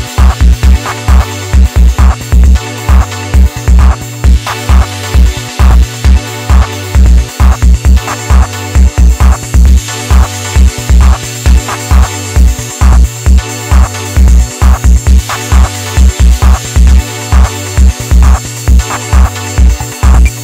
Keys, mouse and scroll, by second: 0.3-2.3 middle drag, 2.3 click, 3.0 ctrl+shift+click, 6.3 click, 7.3 alt+click, 10.2 click, 11.1 ctrl+shift+click, 14.5-16.3 middle drag, 16.3 click, 17.9 click, 19.4-20.1 middle drag, 20.1 Tab.